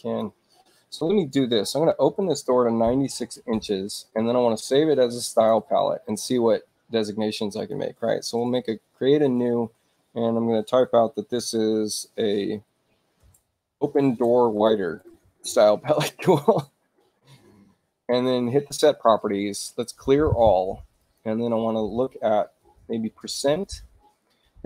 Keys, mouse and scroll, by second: 4.0 click, 5.3 click, 7.6 click, 13.0-14.1 typing, 18.1 click, 19.9 click, 21.0 click, 22.5-23.7 typing.